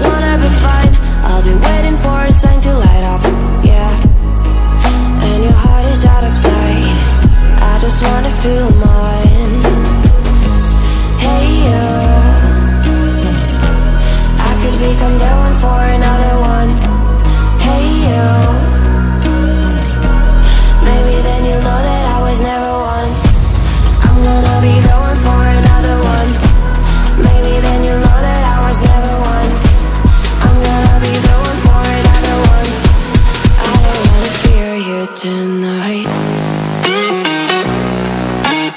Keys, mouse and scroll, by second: 3.1-6.7 drag, 10.1-15.4 drag, 17.1 click, 21.9-25.0 drag, 29.5-32.4 drag, 36.0 click.